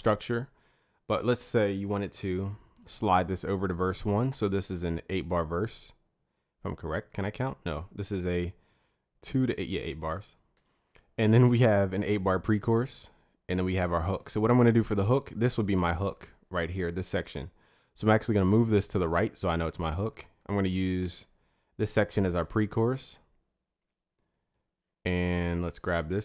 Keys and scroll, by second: 2.3 ctrl+a.